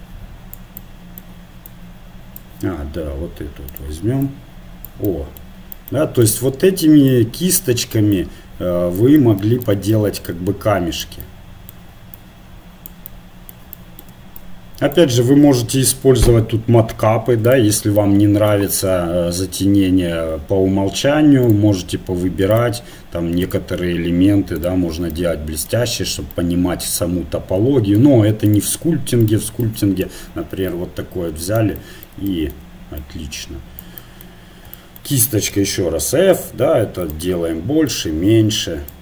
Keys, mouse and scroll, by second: 0.8-8.2 middle drag, 3.7-7.9 drag, 8.2 click, 8.8-13.1 middle drag, 9.2-12.0 drag, 12.1-14.1 drag, 13.6-16.8 middle drag, 14.4-16.3 drag, 17.5 click, 18.4-19.4 right drag, 19.4-21.5 middle drag, 21.5 right click, 22.5-25.2 drag, 25.2-28.4 middle drag, 28.4-35.4 drag, 29.6-34.4 middle drag, 35.5 f, 37.6-39.0 drag.